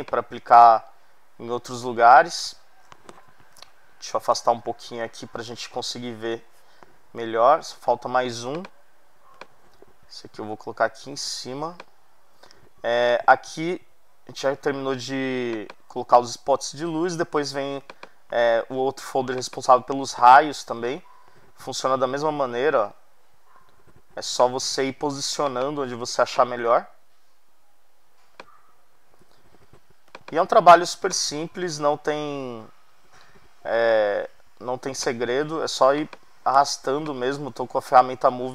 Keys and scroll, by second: 3.5 super+=, 4.3 super+-, 6.0 super+-.